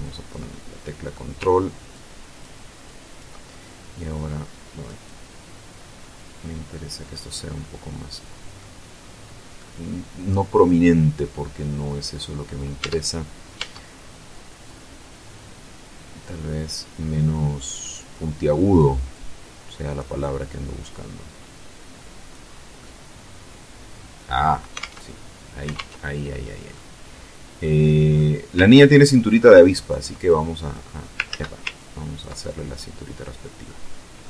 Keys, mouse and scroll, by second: 0.1 ctrl+middle click, 1.5 ctrl+click, 2.5 ctrl+click, 3.6-6.7 drag, 6.7 scroll down 2, 6.9-8.3 middle drag, 8.3-9.2 scroll up 2, 9.2-10.4 middle drag, 12.4 Tab, 13.1 Tab, 14.3-18.5 drag, 18.7-19.7 drag, 19.8-22.1 drag, 22.1-22.4 scroll down 2, 22.4-24.3 middle drag, 24.3 alt+Tab, 25.3 alt+Tab, 26.3-27.9 drag, 28.3-29.7 ctrl+drag, 29.9 ctrl+click, 30.9 ctrl+z, 31.3 ctrl+click, 31.9-33.4 ctrl+middle drag, 33.4-33.8 scroll down 2, 33.8-34.2 middle drag.